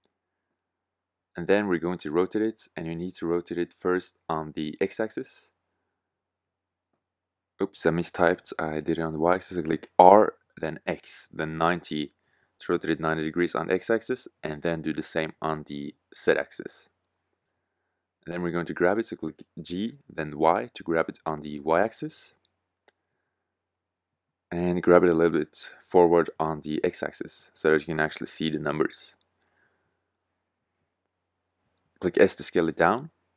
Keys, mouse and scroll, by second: 1.0-3.8 middle drag, 3.8 r, 9.7 r, 11.9 r, 17.9 g, 19.3 click, 20.0 g, 21.2-22.6 drag, 23.1 g, 25.1 click, 26.3 click, 28.4-28.9 middle drag, 30.6 s.